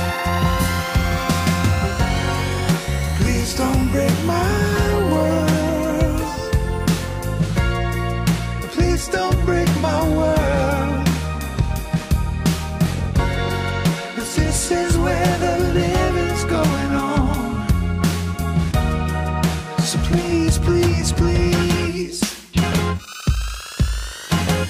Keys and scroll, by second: 11.8 F12.